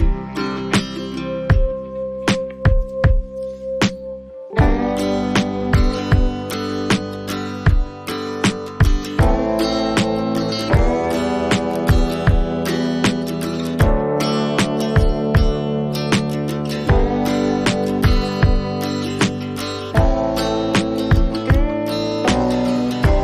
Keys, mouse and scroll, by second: 0.4 click, 1.3 click, 2.3 click, 12.0 ctrl+alt+shift+e, 12.2 right click, 12.2 click, 13.8 click, 17.0 click, 19.6 click, 20.0-21.5 drag.